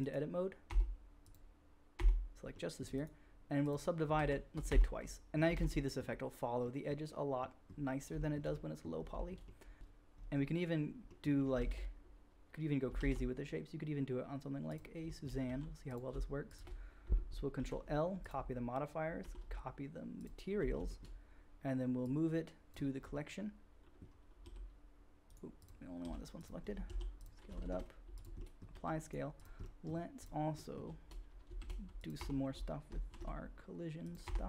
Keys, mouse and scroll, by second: 0.7 Tab, 1.2 middle click, 1.6-9.0 drag, 2.0 Tab, 4.2 shift+r, 4.7 Tab, 5.5 alt+a, 9.0 shift+middle drag, 9.3-11.4 drag, 11.4 shift+middle click, 11.6 shift+a, 13.0 shift+a, 14.3 click, 15.4 g, 16.5 shift+click, 16.5 shift+middle click, 16.5 shift+right click, 17.5 ctrl+l, 19.1 ctrl+l, 21.0-25.3 drag, 22.0-22.7 middle drag, 22.0-22.7 right drag, 24.5 r, 25.3 middle drag, 25.6-26.0 drag, 26.0 r, 26.8 s, 27.6 ctrl+a, 28.7 middle click, 28.7 g, 29.3 click, 29.4-30.1 middle drag, 30.1 click, 30.3-31.0 middle drag, 31.0-31.4 drag, 31.6 click, 31.6 shift+d, 31.9 middle click, 32.2 Tab, 33.2 ctrl+b, 33.2 click, 34.0 middle click, 34.2 Tab.